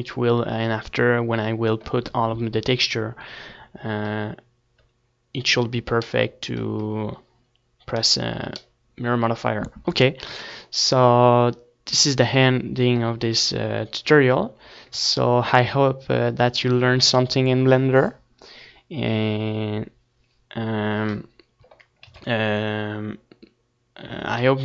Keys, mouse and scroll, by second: 4.8-9.1 middle drag, 9.1 ctrl+s, 11.5-13.9 middle drag, 13.9 ctrl+s, 21.3 ctrl+s, 22.0-24.6 middle drag.